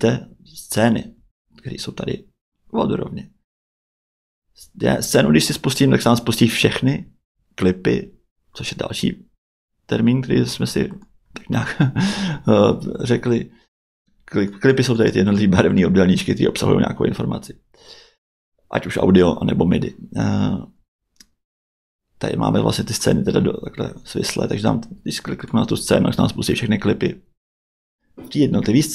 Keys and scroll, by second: 1.1 Tab, 20.3 Tab.